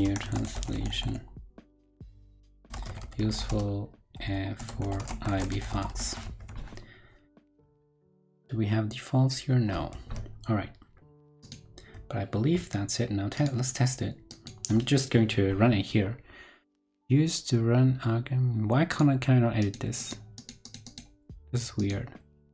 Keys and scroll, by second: 6.2 super+s, 9.9 super+s.